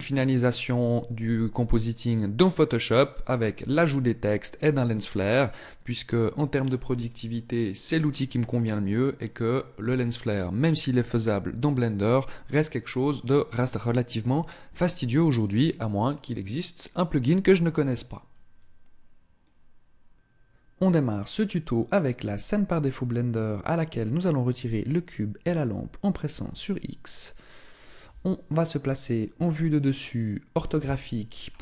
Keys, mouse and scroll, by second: 25.4 shift+right click, 26.3 x, 29.3 KP_7, 30.5 KP_5.